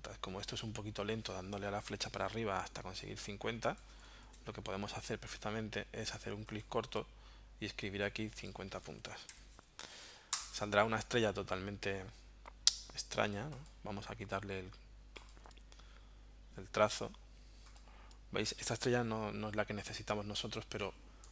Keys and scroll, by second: 1.9 Up, 4.3 BackSpace, 8.8-9.8 typing, 10.4 Return.